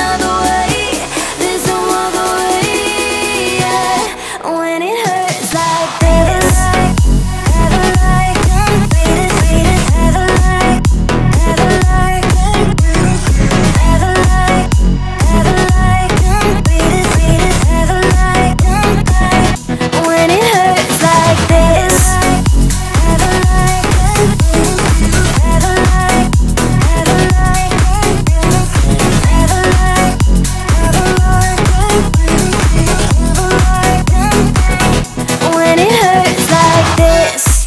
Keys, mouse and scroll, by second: 4.5 click, 5.3 shift+click, 7.6 click, 11.0-15.6 drag, 21.4 alt+scroll down 1, 21.9 alt+scroll up 1, 22.3-22.7 drag, 23.6 Right, 25.9 Left, 26.8 click, 28.9 alt+scroll down 1, 29.7-30.1 alt+scroll up 1, 30.4-31.0 drag, 36.1-36.5 alt+scroll down 1, 37.2 right click.